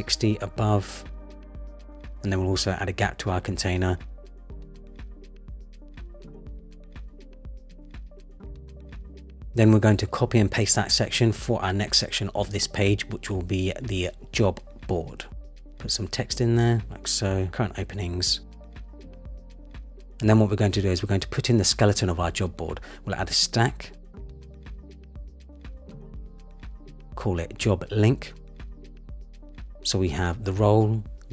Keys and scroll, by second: 5.2 shift+Up, 9.9 super+c, 10.0 super+v, 15.6 super+c, 15.8 super+a, 15.9 super+v, 16.3 Return, 17.2 Return, 20.9 super+v, 21.1 Return, 21.3 super+c, 21.3 super+v, 28.7 Return.